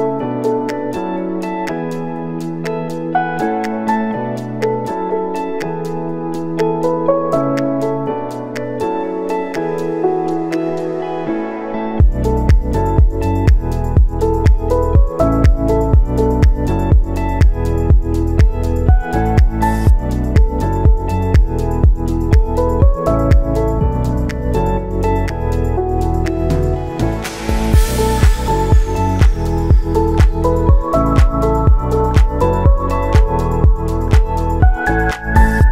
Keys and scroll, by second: 7.0 w, 10.2 v, 15.4 w, 18.1 v, 23.8 w, 26.5 v.